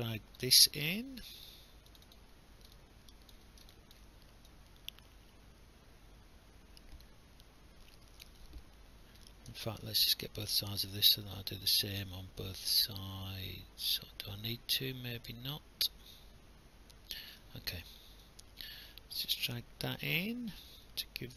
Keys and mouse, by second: 0.4 right click, 1.9 click, 2.8 alt+click, 3.9 alt+click, 9.5 ctrl+z, 11.3 alt+click, 18.2 click.